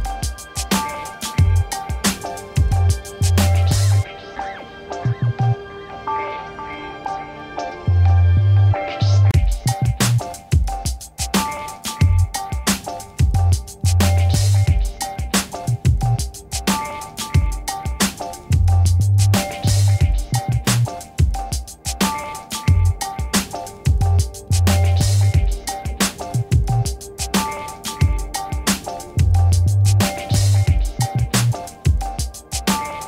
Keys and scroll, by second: 11.9 2, 13.9 1, 14.6 Return, 18.9 space, 20.9 ctrl+a, 21.3 v, 23.0 ctrl+d, 23.9 Left, 27.0 ctrl+-.